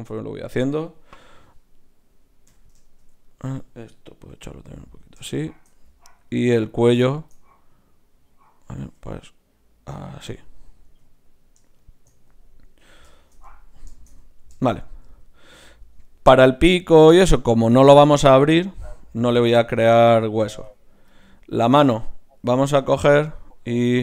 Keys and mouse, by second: 1.8 right click, 2.5 KP_3, 4.3 g, 6.3-9.9 drag, 8.8 g, 10.8 g, 12.7 KP_1, 21.4 right click.